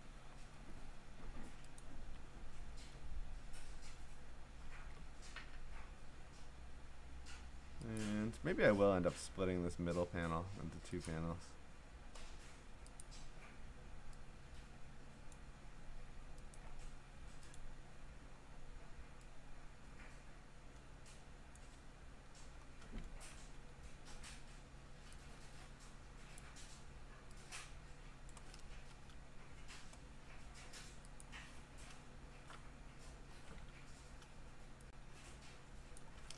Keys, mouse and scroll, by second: 0.3-0.9 scroll, 1.8 ctrl+click, 2.6-3.3 scroll, 3.3-3.7 scroll down 5, 6.1-7.2 scroll up 10, 8.0 click, 8.8-9.2 scroll, 11.1 click, 13.0 click, 15.3 click, 16.6 click, 18.5-19.1 scroll, 21.6 click, 23.4 ctrl+t, 26.4 click, 28.3 click, 28.7 Return, 30.1-30.7 scroll, 31.2 click, 32.7-33.2 scroll, 33.7 ctrl+t, 35.9 click.